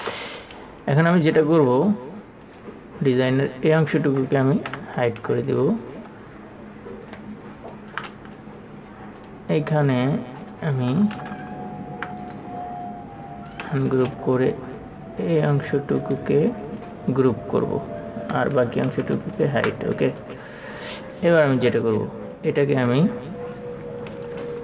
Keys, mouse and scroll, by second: 0.2 ctrl+alt+super+click, 5.1-6.2 typing, 8.6 typing, 9.6 click, 12.6-13.7 right drag, 13.8 click, 15.6 shift+click, 18.6 ctrl+g, 19.3 ctrl+g, 19.3 space, 19.7 alt+super+m, 20.3 click.